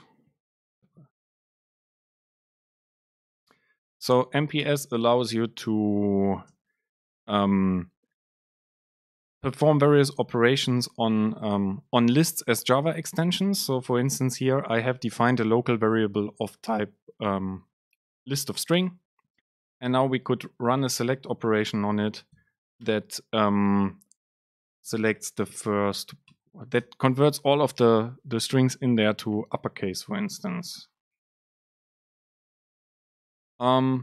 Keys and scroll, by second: 2.5 Right, 2.7 Return, 3.5 Return, 3.6 super+space, 4.0 BackSpace, 4.6 BackSpace, 4.6 super+space, 5.8 BackSpace, 6.5 BackSpace, 16.5 Down, 17.1 Up, 18.0 End, 18.6 Down, 18.9 Left, 19.4 Left, 19.5 super+space, 24.9 BackSpace, 25.7 super+space, 33.8 Up.